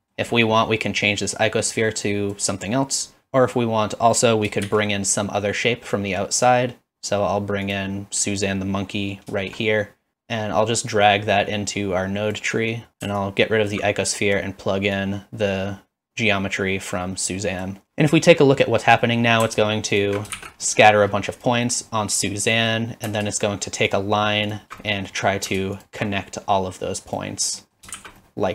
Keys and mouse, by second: 0.0 middle click, 1.5 middle click, 2.1 click, 3.2 Tab, 3.2 middle click, 4.1 middle click, 9.3 shift+middle click, 11.0-12.3 drag, 13.2-13.8 alt+drag, 14.2 click, 14.9-17.6 drag, 19.9 alt+shift+click, 20.4 shift+z, 20.6 middle drag, 21.6 middle click, 22.6 middle click, 23.4 alt+shift+click, 23.9 alt+shift+click, 24.5 alt+shift+click, 24.9 middle click, 25.8 alt+shift+click, 27.1 click, 27.6 middle click, 28.0 shift+z, 28.2 middle click.